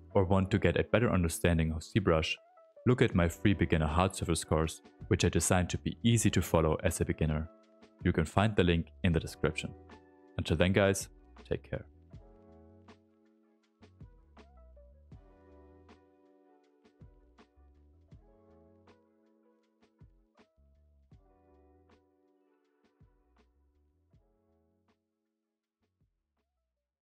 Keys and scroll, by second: 1.0 w, 1.3 q, 3.3 s, 3.7 s, 4.8 space.